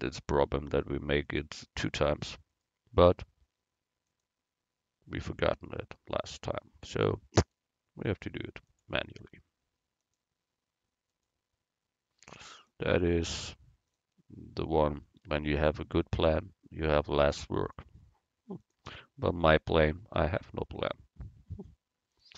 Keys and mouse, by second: 2.7-4.7 right drag, 4.2-6.1 drag, 7.6-10.0 right drag, 8.8-10.6 drag, 11.3-14.5 right drag, 12.6-14.5 drag, 14.7 middle click, 15.6 middle click, 16.3-19.3 right drag, 17.7-19.3 drag, 19.4-20.5 middle drag, 20.5-22.2 right drag, 22.2-22.3 drag.